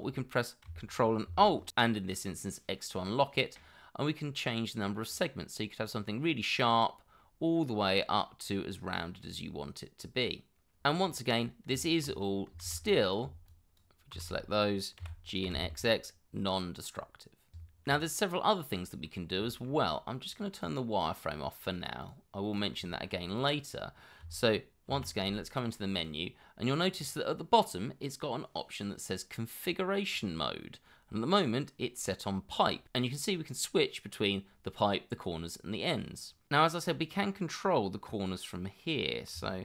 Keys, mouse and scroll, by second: 4.1 ctrl+alt+scroll up 1, 4.8 ctrl+alt+scroll down 1, 6.8 ctrl+alt+scroll up 1, 10.1 ctrl+alt+scroll down 1, 10.8 scroll down 1, 11.1 middle click, 11.7 Tab, 12.6 shift+z, 13.5 shift+click, 14.1 shift+z, 14.4 scroll up 1, 15.0 g, 15.4 x, 18.0 scroll up 1, 18.3 middle click, 18.8 Tab, 19.5 scroll up 1, 19.8 middle click, 20.3 shift+middle click, 22.9 shift+middle click, 24.9 shift+2.